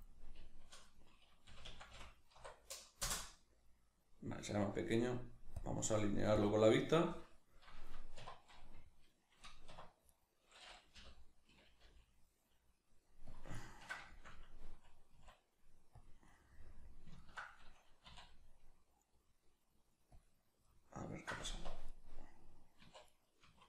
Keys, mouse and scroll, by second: 8.2 1, 10.1 right click, 11.0 l, 13.4 click, 13.6-16.0 ctrl+middle drag, 15.1 s, 16.0 click, 16.3-20.1 middle drag, 18.1 e, 20.1-20.6 drag, 20.6-21.9 middle drag, 21.5 1, 21.9 right click, 22.8 2, 23.1 right click, 23.4 1.